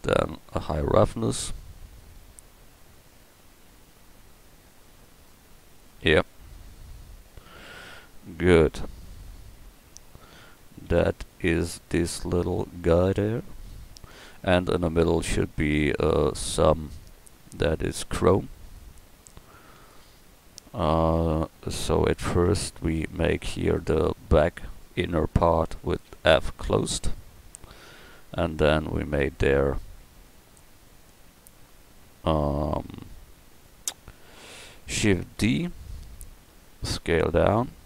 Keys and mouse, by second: 8.2 KP_1, 11.4 middle drag, 11.8 middle click, 13.2 middle click, 17.6 click, 18.5-19.9 drag, 19.9-21.5 middle drag, 22.5 Tab, 24.9 click, 26.1 f, 26.7 Tab, 31.1 Tab, 35.4 shift+d, 36.7 s.